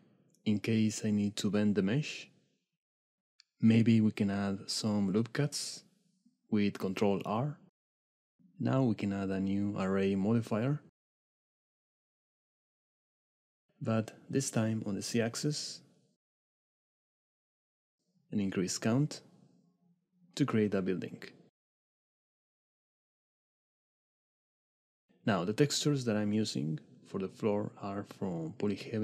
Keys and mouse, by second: 2.2 click, 4.0 ctrl+r, 5.3 ctrl+r, 6.4 ctrl+r, 7.7 Tab, 8.1 click, 9.5-12.2 drag, 13.4 click, 15.2-17.0 drag, 17.2 middle click, 18.0 click, 18.3 shift+middle click, 18.7 middle click, 20.8 middle click, 23.0-24.1 drag, 25.8 click, 26.6-26.9 drag, 26.9 middle click, 27.9 middle click.